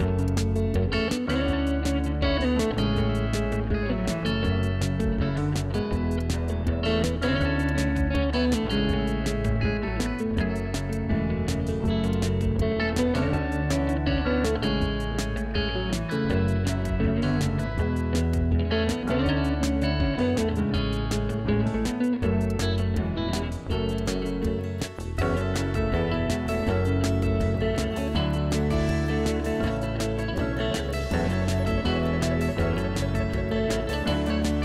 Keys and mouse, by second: 0.3 Delete, 1.0 click, 1.8 Delete, 2.8 click, 3.3 s, 3.6 ctrl+click, 4.3 1, 5.3 s, 5.7 ctrl+click, 6.1 click, 7.1 ctrl+shift+x, 7.5 click, 8.1 ctrl+1, 8.3 Delete, 8.7 click, 9.5 ctrl+shift+x, 10.3 ctrl+click, 10.7 ctrl+shift+x, 10.8 click, 14.4 shift+click, 15.5 ctrl+1, 15.5 click, 19.3 KP_1, 19.4 Return, 20.2 KP_2, 20.2 Return, 21.6 click, 24.4 ctrl+1, 24.5 click, 24.8 ctrl+shift+x, 25.6 Up, 25.9 KP_1, 26.2 8.